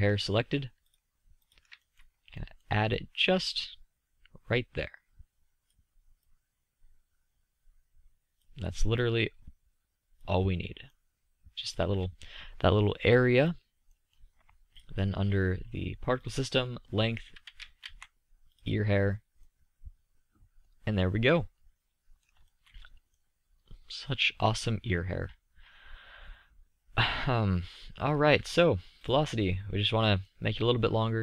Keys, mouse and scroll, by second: 0.1-1.3 middle drag, 8.0-9.6 drag, 10.8-12.2 drag, 15.1 click, 15.1 middle click, 15.3 click, 15.3-19.2 middle drag, 20.8-21.9 middle drag, 22.4-25.1 middle drag, 25.2-25.9 middle drag, 30.4-31.2 drag.